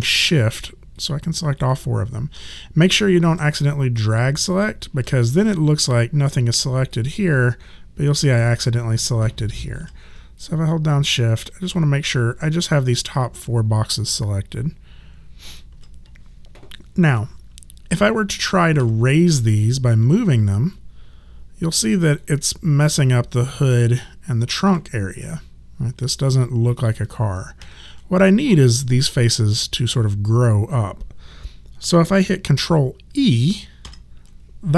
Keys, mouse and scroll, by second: 0.3 shift+click, 3.9 shift+click, 6.9 alt+click, 10.4 shift+click, 11.8 alt+click, 18.8 w, 20.7 click, 27.6 ctrl+z, 33.8 ctrl+e.